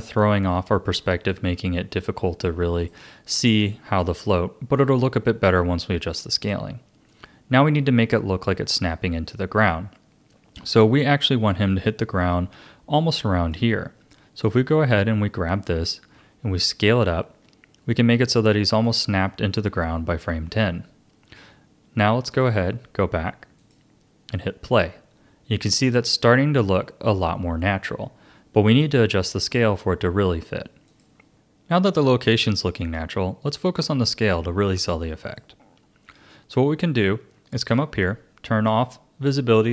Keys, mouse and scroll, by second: 2.8-5.8 drag, 7.1-10.2 drag, 14.4 click, 16.1 s, 22.3-26.6 drag, 30.9-34.1 drag, 35.2-39.4 drag, 39.6 click.